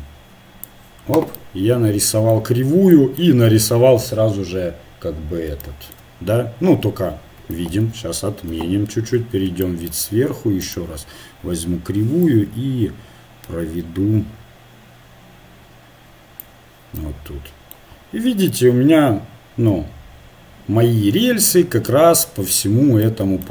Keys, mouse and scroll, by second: 1.3-5.0 middle drag, 7.7 ctrl+z, 8.5 KP_7, 10.6-12.5 drag, 17.3-20.7 middle drag, 21.2 middle click, 22.3 middle click, 23.2-23.5 middle drag.